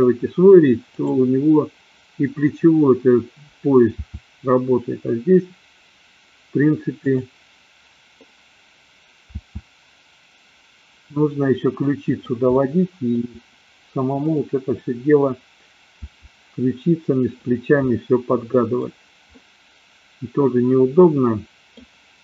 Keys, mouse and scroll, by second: 0.9 click, 3.5 click, 4.1 r, 7.0 click, 9.4 r, 12.6 middle click, 14.1 click, 16.0 r, 17.6 click, 17.9-18.9 middle drag, 19.2-21.9 middle drag.